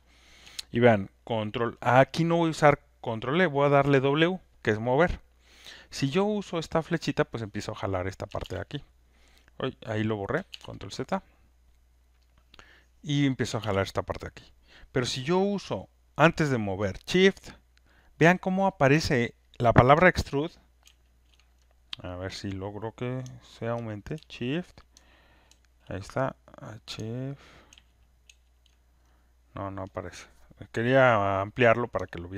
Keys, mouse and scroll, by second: 7.5 click, 8.4 ctrl+z, 8.4 ctrl+x, 10.6 ctrl+z, 13.1 click, 13.6 ctrl+z, 20.8 ctrl+shift+F1, 25.4 ctrl+shift+F1, 27.7 ctrl+shift+F1.